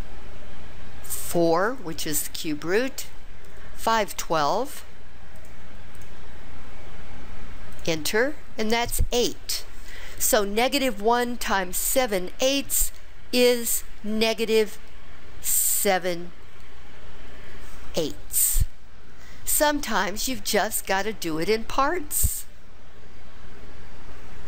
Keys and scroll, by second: 1.9 4, 4.8 5, 5.5 1, 6.1 2, 7.9 Return.